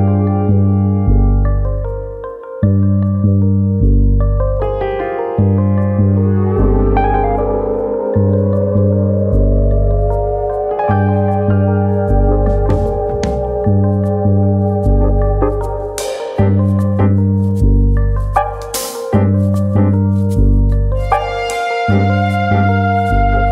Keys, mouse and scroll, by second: 0.2 middle click, 0.5 scroll up 1, 1.5 click, 2.3 middle click, 2.9 click, 3.7 middle click, 4.5 1, 4.6 click, 5.1 click, 6.0 middle click, 7.2 middle click, 8.0 alt+click, 8.2 middle click, 8.8 click, 9.9 middle click, 10.5 click, 11.7 alt+click, 12.0 middle click, 12.5 click, 13.1 middle click, 13.7 click, 15.2 click, 17.0 click, 18.8 click, 20.7 click, 20.7 middle click, 21.3 middle click, 22.1 middle click, 22.7 middle click, 23.3 alt+click.